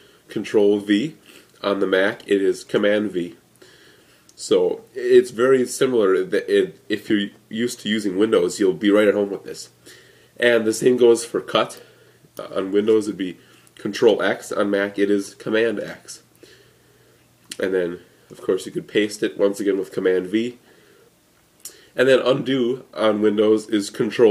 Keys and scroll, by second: 2.7 super+v, 15.9 super+x, 18.4 super+v.